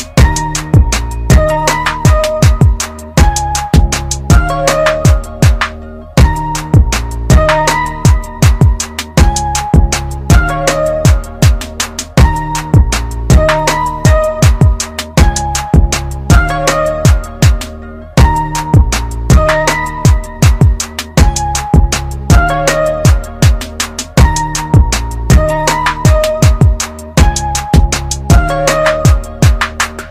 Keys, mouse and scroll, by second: 3.6 click, 8.9 click, 12.0 typing, 16.8 click, 16.8 typing, 18.8-19.9 scroll up 1, 21.9 click, 25.3-27.6 typing, 29.5 ctrl+KP_Subtract.